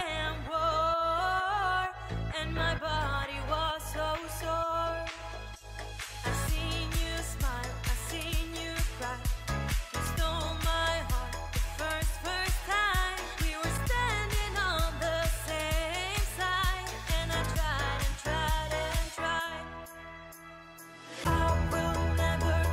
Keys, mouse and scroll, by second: 0.6 click, 2.3 double click, 6.6 double click.